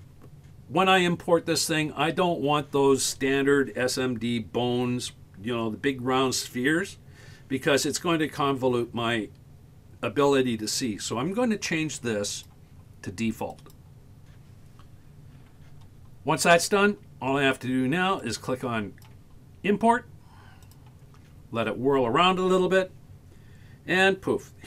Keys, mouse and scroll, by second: 15.7-19.7 scroll up 1.